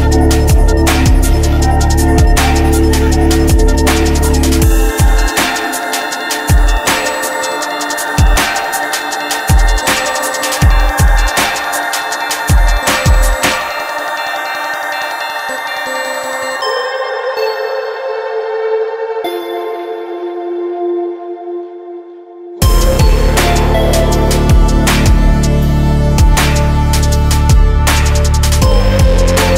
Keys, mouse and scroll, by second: 4.0 click, 5.6 right click, 8.3 KP_0, 9.4 right click, 10.1 s, 13.0 KP_0, 14.2 click, 16.4 KP_0, 17.3 KP_0, 17.7 KP_0, 18.1 middle click, 18.3 middle click, 18.5 click, 20.5 click, 21.4 right click, 22.0-23.2 middle drag, 23.2-24.6 right drag, 24.9 right click, 26.3 right click, 28.7 KP_0, 29.2 KP_0.